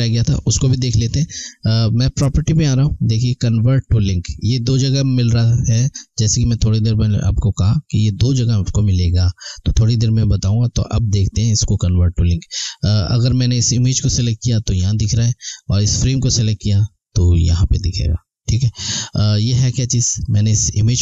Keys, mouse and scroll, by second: 2.0 click, 13.6 click, 18.6 click.